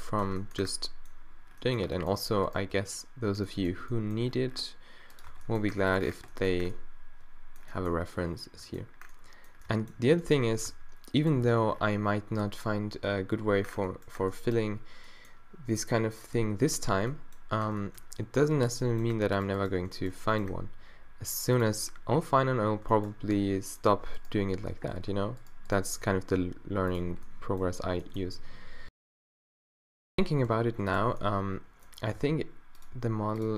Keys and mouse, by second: 0.1-1.6 drag, 0.3 Tab, 1.9 Tab, 3.8 g, 5.3 Tab, 8.8-10.7 drag, 10.7 Tab, 11.5 g, 13.7 middle click, 19.3 middle click, 20.2 middle click, 20.5-21.5 right drag, 20.5 d, 22.9 middle click, 24.7 z, 27.2 b, 27.9 b, 29.4 z, 30.5 d, 31.2 b, 32.2 d, 33.0 g.